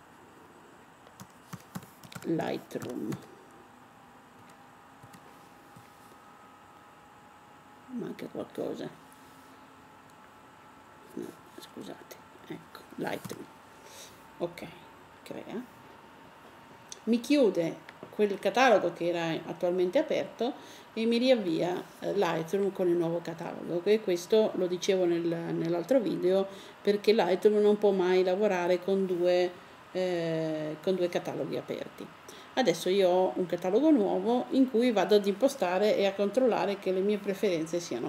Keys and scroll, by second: 1.0-2.8 typing, 4.1-4.8 typing, 6.9 typing, 13.0 typing.